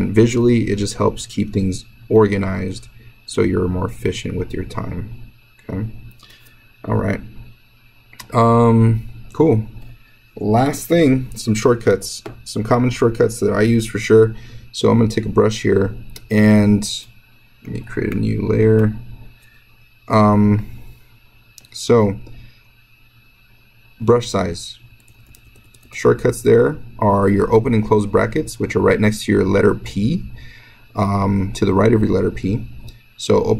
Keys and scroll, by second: 24.8-26.2 typing, 27.6 [, 27.7 [, 27.9 [, 28.2 [, 29.7 [, 30.1 [, 31.9 [, 32.1 [, 32.3 [, 32.5 [.